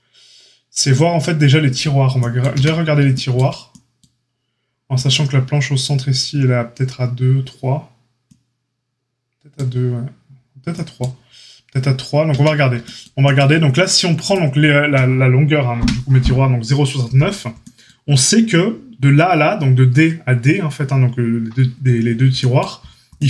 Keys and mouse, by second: 2.5 Tab, 12.3 Tab.